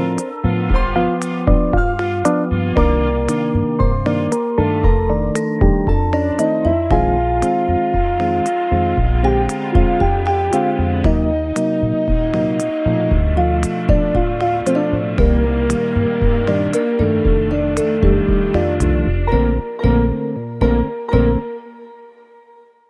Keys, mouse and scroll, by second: 2.0 right click, 4.8 scroll down 2, 5.1 middle click, 9.7 s, 10.1 m, 12.7 g, 13.5 x, 14.6-15.0 scroll up 3, 15.0 w, 15.1 g, 15.2 z, 19.7 s, 20.8 g, 22.5 x.